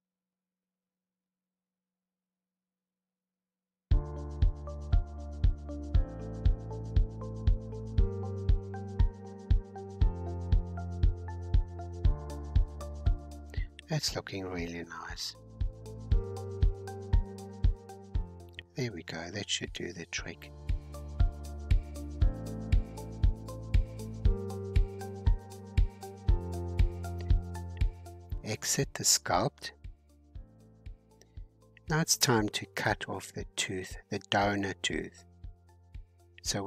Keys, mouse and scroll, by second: 2.6 scroll down 2, 2.9 scroll up 1, 3.0 middle click, 3.9-6.6 drag, 6.6-8.6 middle drag, 8.6-9.1 scroll up 3, 9.1 scroll down 1, 9.1 shift+middle click, 9.8 shift+scroll up 1, 9.9-11.1 middle drag, 11.1-13.1 drag, 13.1-13.5 scroll down 2, 13.5-15.1 middle drag, 15.1-18.0 drag, 18.0-19.3 middle drag, 19.3-21.3 drag, 21.3-21.9 scroll down 3, 21.9-22.9 middle drag, 22.9 scroll up 1, 23.1-24.8 middle drag, 24.8 scroll up 4, 25.6 click, 26.4 scroll down 2, 29.7-31.1 drag, 31.1-31.9 scroll down 4, 31.9-35.2 middle drag, 35.2 scroll up 3, 35.7-36.6 shift+middle drag.